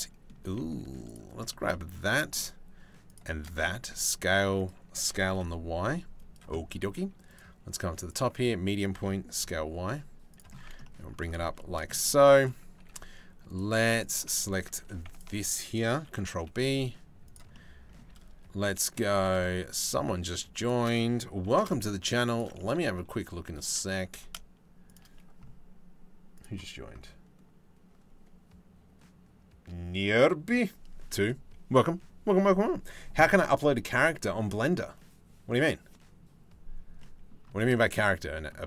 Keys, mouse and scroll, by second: 1.1 shift+middle click, 1.8-3.0 shift+middle drag, 3.2 s, 4.5 s, 6.9 middle click, 8.5 s, 10.3 Tab, 10.6 click, 11.0 Tab, 11.2 middle click, 11.5 shift+middle click, 11.7 middle click, 12.4 ctrl+r, 13.6 alt+click, 14.4 2, 15.6 ctrl+b, 17.1 middle click, 21.0 ctrl+b, 22.2 middle click, 22.8 3, 23.0 4, 23.2 click, 23.6 g, 36.6 click, 37.2 shift+middle click, 37.9 shift+middle click.